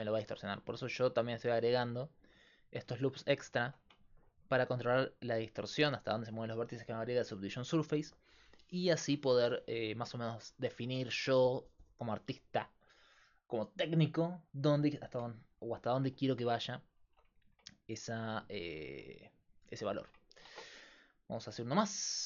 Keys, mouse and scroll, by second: 0.0-22.2 typing, 0.6 ctrl+r, 3.7 Tab, 17.1 Tab, 20.5 ctrl+Tab.